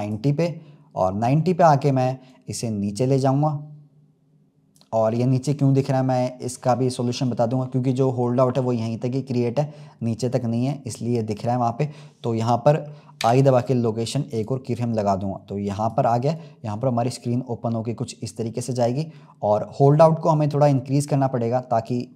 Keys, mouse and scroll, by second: 0.0-0.8 drag, 0.8-2.2 scroll up 2, 2.2 click, 13.1 i, 15.7-19.3 drag.